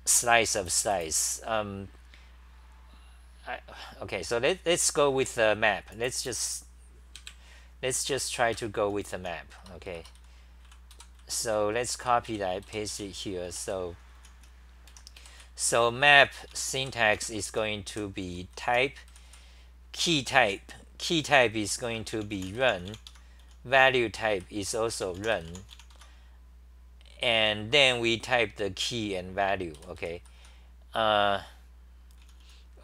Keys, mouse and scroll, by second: 8.6 ctrl+g, 9.6 Return, 9.6-13.4 typing, 9.8 Return, 10.0 Return, 14.7-20.4 typing, 21.9-24.9 typing, 23.1 Home, 26.0 Home, 26.0 u, 27.8 t, 29.8 g, 30.0 g, 30.2 g, 30.4 g, 32.3 t, 32.4 t.